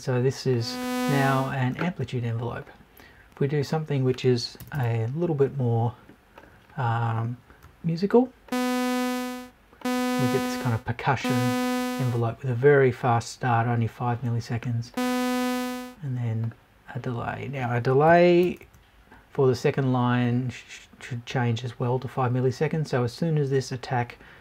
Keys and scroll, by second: 4.6 BackSpace, 18.1 Right, 18.4 BackSpace.